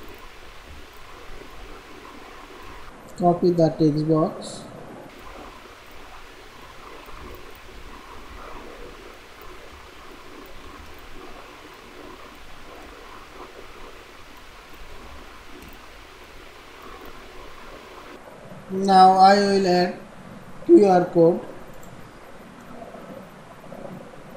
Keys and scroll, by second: 7.1 ctrl+c, 7.6 ctrl+a, 8.3 ctrl+v, 9.7 ctrl+b.